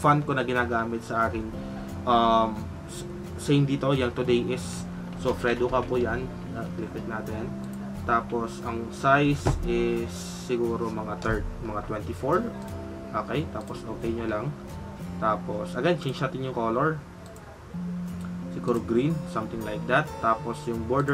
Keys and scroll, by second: 5.1-6.0 typing.